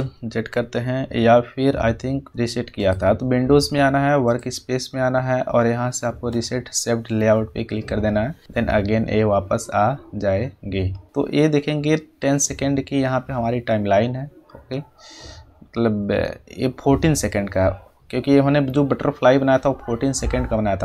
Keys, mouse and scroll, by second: 2.3 F8, 2.7 click, 11.3-15.4 drag.